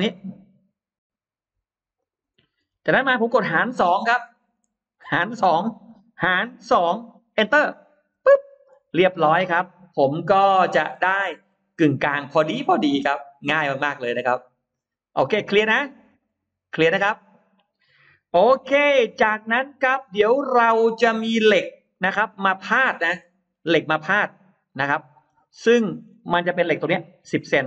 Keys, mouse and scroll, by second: 1.8 click, 2.2-3.5 scroll down 4, 3.8 scroll down 2, 4.1-5.0 scroll up 3, 4.2 middle click, 6.5 2, 8.0 Return, 9.4 scroll up 1, 10.0 scroll up 1, 11.0 space, 11.3 middle click, 12.6-12.9 scroll up 2, 14.3-14.6 scroll down 2, 15.0 scroll up 1, 15.1 middle click, 15.7-16.8 scroll up 2, 19.0-19.6 scroll down 1, 20.0-21.2 scroll up 3, 21.7 scroll up 1, 21.9 middle click, 22.8-23.4 scroll up 1, 23.7-25.0 middle drag, 25.6-26.0 scroll up 1, 26.2 middle click, 26.6-26.9 scroll down 1, 27.4 shift+x.